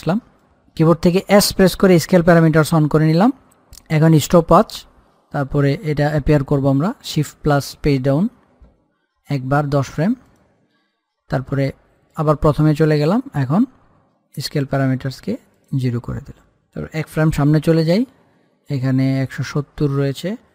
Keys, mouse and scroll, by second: 0.5 click, 1.6-2.2 typing, 4.4 click, 7.2 click, 8.2 shift+Page_Down, 10.5 click, 15.8 click, 17.8 Page_Down, 19.7 click.